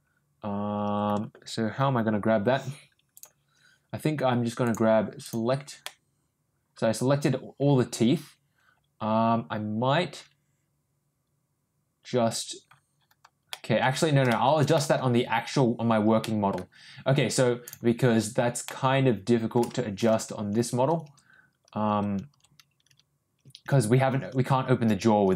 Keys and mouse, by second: 4.6 click, 5.2 click, 5.8-12.2 middle drag, 13.5 middle click, 14.3 shift+middle click, 14.7 middle click, 16.2 middle click, 17.6 click, 18.6 middle click.